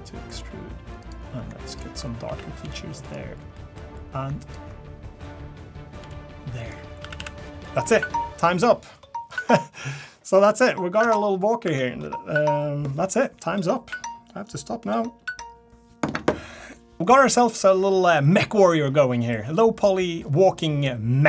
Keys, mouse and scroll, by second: 1.7 alt+click, 2.3 a, 2.6 g, 3.5 middle click, 4.4 alt+click, 6.0 g, 7.0 a, 7.2 a, 7.4 middle click.